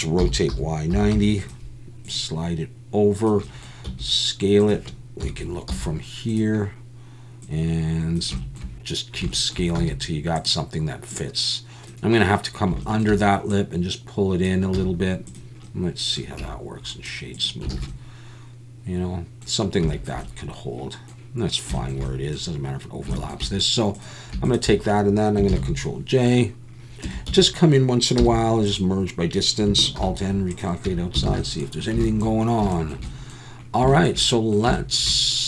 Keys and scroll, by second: 0.2 r, 0.5 y, 0.9 9, 1.1 0, 3.8 s, 5.2 KP_1, 5.7 z, 9.8 s, 14.7 z, 16.4 Tab, 17.7 alt+a, 25.5 ctrl+j, 27.0 Tab, 27.3 a, 28.2 m, 30.0 alt+n, 30.9 Tab, 31.3 alt+a.